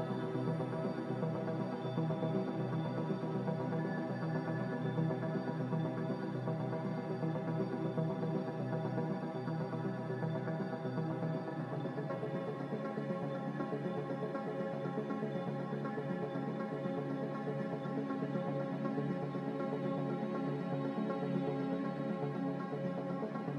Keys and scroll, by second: 3.1 5, 3.3 Return, 6.7 ctrl+z, 9.2 ctrl+y, 12.3 ctrl+z, 18.2 5, 18.5 Return.